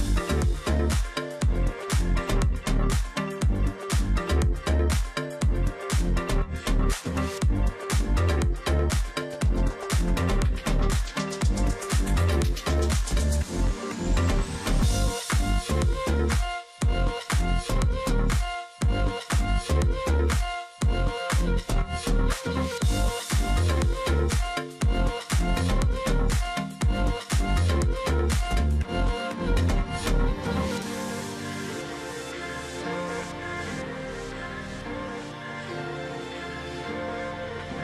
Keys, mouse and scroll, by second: 0.7 ctrl+z, 3.4 double click, 4.3 ctrl+click, 5.3 shift+click, 6.8 alt+click, 7.5 double click, 7.7-8.0 alt+scroll down 1, 8.0 space, 8.6-9.4 scroll up 2, 9.7-10.2 alt+scroll up 1, 10.2 ctrl+click, 10.4-10.8 alt+scroll up 1, 14.5 ctrl+z, 16.2 ctrl+click, 16.3 alt+scroll down 1, 17.0 space, 17.8 ctrl+click, 18.3-18.8 alt+scroll up 1, 21.5 ctrl+z, 28.2 ctrl+click, 28.4-28.8 alt+scroll down 1, 28.8 alt+scroll up 1, 30.8 ctrl+z, 31.5 double click, 33.7 ctrl+click, 35.6-35.9 alt+scroll down 1, 36.5-37.0 alt+scroll up 1, 37.3 space.